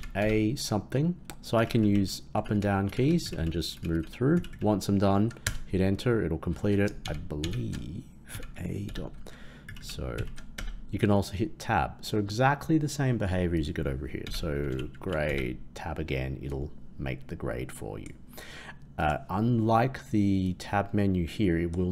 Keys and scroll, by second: 7.0 shift+Left, 7.3 shift+Left.